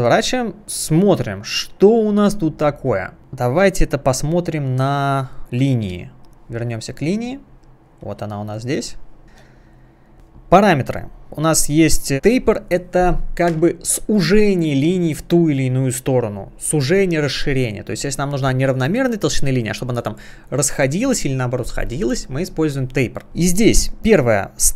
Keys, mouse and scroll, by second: 1.7-2.9 scroll down 1, 5.9 space, 6.2 click, 6.7 space, 8.1 space, 8.4-8.7 scroll down 1, 9.2 space, 9.9 scroll down 1.